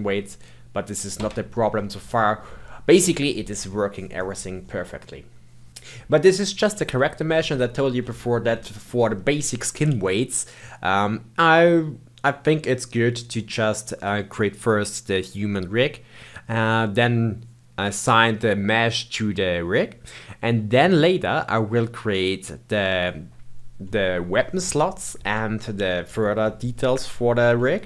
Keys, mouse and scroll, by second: 1.8-5.0 middle drag, 7.4-11.6 shift+middle drag, 25.6-27.8 shift+middle drag.